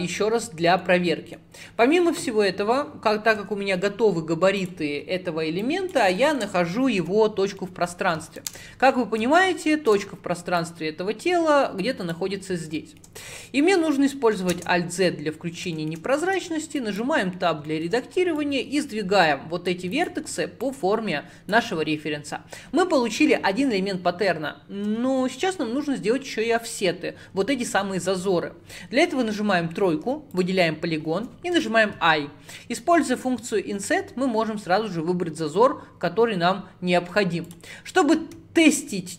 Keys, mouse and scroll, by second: 0.2-0.6 scroll down 5, 0.9-3.4 middle drag, 3.4 Tab, 4.6-5.7 drag, 6.2 shift+middle click, 7.1 /, 7.6-10.6 middle drag, 10.6 click, 12.4-12.8 scroll up 6, 12.8-14.6 shift+middle drag, 14.6 alt+z, 15.2 scroll up 5, 15.8 shift+middle click, 16.3 Tab, 16.9 click, 17.3-18.4 middle drag, 17.3-17.7 scroll up 1, 18.4 click, 20.0 click, 20.7 click, 29.2 3, 30.4 click, 31.6 i, 37.9-39.1 middle drag.